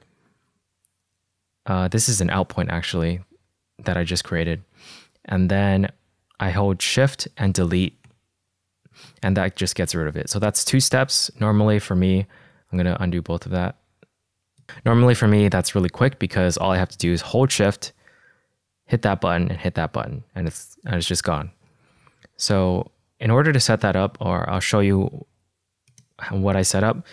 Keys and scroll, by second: 8.4 BackSpace, 11.6 super+z, 12.7 super+z, 19.4 =, 20.0 BackSpace, 24.6 k.